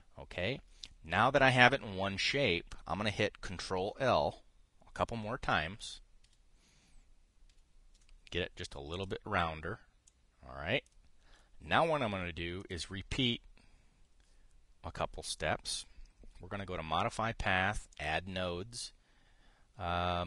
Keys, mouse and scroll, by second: 6.2 ctrl+l, 6.9 ctrl+l, 8.2 ctrl+l, 9.6 click, 10.8 click, 13.3 click, 18.6 click.